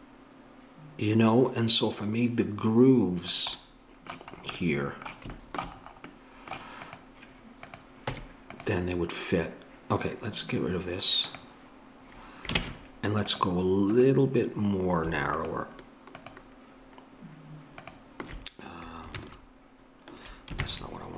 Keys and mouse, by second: 6.8-8.1 drag, 8.1 Tab, 12.6 ctrl+Tab, 17.4-19.1 drag, 19.1 ctrl+KP_Add, 20.6 ctrl+KP_Subtract.